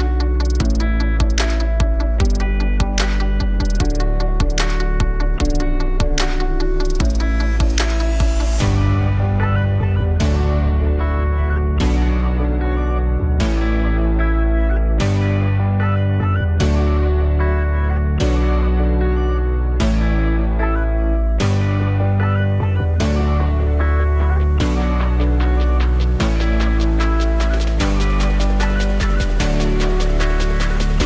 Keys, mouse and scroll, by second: 0.2 r, 6.3 click, 8.1 click, 8.8 click, 9.7-10.7 drag, 10.7 o, 11.9 click, 12.3 click, 14.9-18.0 drag, 18.8 click, 19.7-22.7 drag, 24.9-29.8 drag, 29.8-31.0 scroll down 2.